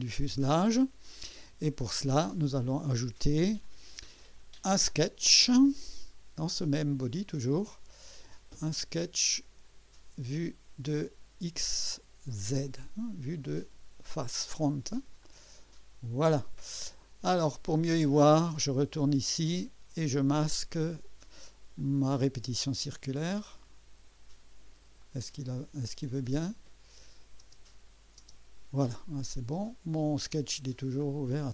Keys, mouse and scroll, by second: 9.3 click, 12.6 click, 15.2 click, 17.0 scroll up 2, 18.3 click, 21.8 click, 22.4 space, 25.0 click, 25.9 click, 27.4 space, 28.2 space, 29.6 click.